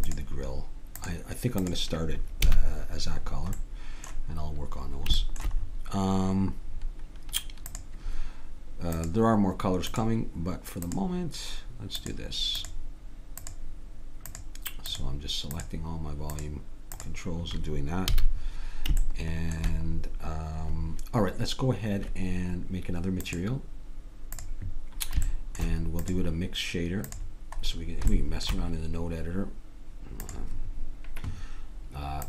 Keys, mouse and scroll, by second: 0.0-2.7 drag, 2.5 a, 7.7-15.5 drag, 18.1 a, 23.2-27.9 drag, 28.1 middle click, 30.2-32.0 drag.